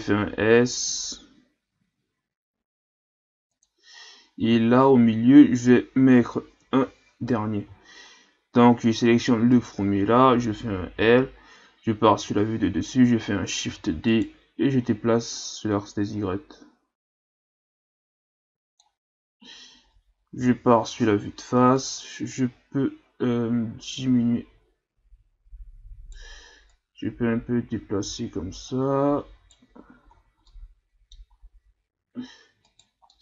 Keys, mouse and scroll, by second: 0.0 s, 4.4 a, 6.6 ctrl+KP_1, 7.4-7.9 scroll down 1, 7.9-8.8 shift+scroll up 4, 9.5 right click, 10.9 l, 12.1 KP_7, 13.6 shift+d, 15.3-18.3 drag, 20.4 KP_1, 21.8 right click, 22.4 right click, 26.7 right click, 30.1-30.5 scroll down 3, 30.5 middle click, 31.3 scroll up 4, 32.7 right click, 33.1-33.2 middle drag.